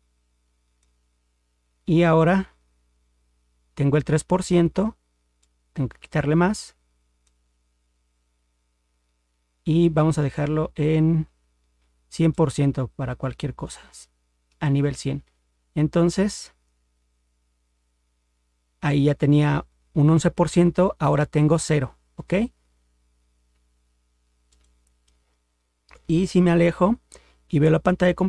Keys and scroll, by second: 26.4 ctrl+0.